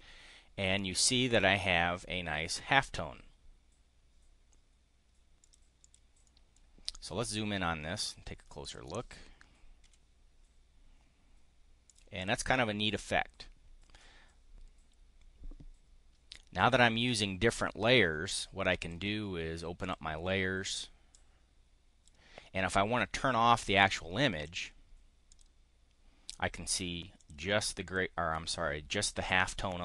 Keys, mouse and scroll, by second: 5.3 click, 5.6 click, 6.0 click, 8.6 click, 9.8 5, 11.8 click, 12.1 click, 18.8 click, 19.9 click, 21.1-22.2 drag, 25.3 click, 27.2 click, 27.7 click.